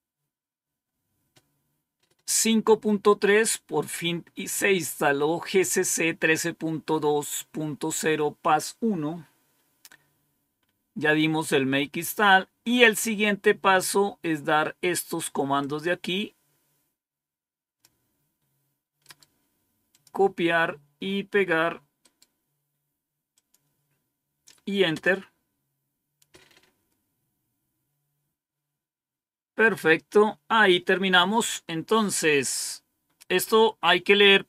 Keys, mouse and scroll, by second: 0.6-1.2 scroll down 1, 1.3-1.6 scroll up 1, 3.2-3.9 scroll down 1, 5.2-5.7 scroll down 1, 6.2-6.6 scroll down 2, 8.9-9.8 scroll down 2, 11.5-12.1 scroll down 2, 15.5-17.7 drag, 18.9 right click, 19.6 right click, 20.0 click, 21.9 right click, 23.2 click, 24.8 Return.